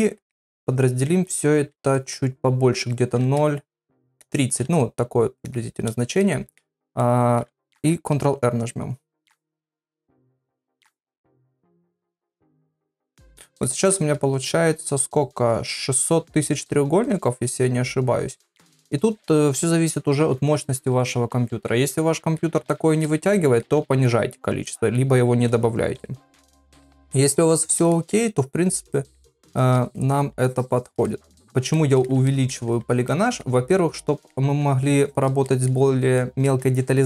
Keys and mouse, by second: 1.7 shift+r, 3.2 shift+r, 4.6 shift+r, 7.0 ctrl+middle click, 13.7 ctrl+middle click, 22.0 middle click, 22.7 shift+middle click, 23.3 ctrl+middle click, 24.1 middle click, 24.7 shift+middle click, 26.0-26.4 ], 27.1 shift+], 27.3 shift+click, 27.9 middle click, 28.4 shift+click, 28.9 middle click, 29.5 click, 29.6 shift+click, 30.0 middle click, 30.5 shift+click, 31.1 middle click, 31.8 middle click, 32.3 ctrl+middle click, 33.1 middle click, 34.0 middle click, 35.0 shift+click, 35.5 middle click, 36.2 middle click.